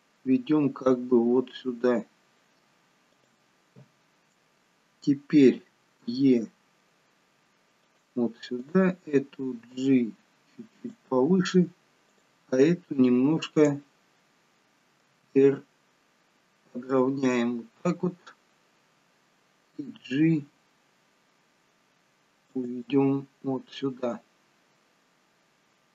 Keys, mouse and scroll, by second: 6.0 e, 8.6 click, 9.8 g, 12.1 click, 13.6 click, 15.0 r, 19.8 g.